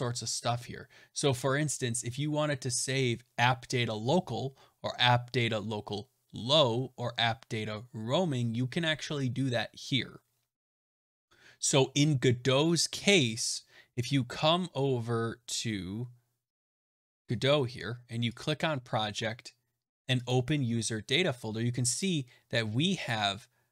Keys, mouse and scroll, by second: 11.0 click, 18.3 click, 20.2 click, 23.0 click.